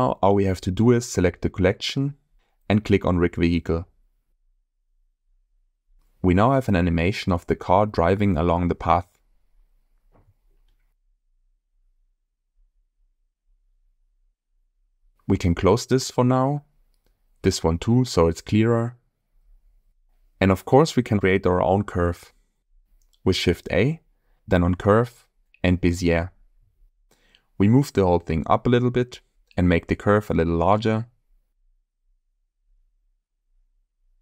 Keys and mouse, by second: 0.0 click, 4.7-5.1 shift+middle drag, 6.0 click, 6.3 space, 8.0-9.5 drag, 10.8-11.3 shift+middle drag, 14.7 space, 16.3 click, 18.0 click, 20.7-21.3 shift+middle drag, 22.0 click, 23.3 shift+a, 27.1 z, 28.5 s, 31.8 g, 31.8 z, 32.6 click, 33.3-34.2 middle drag.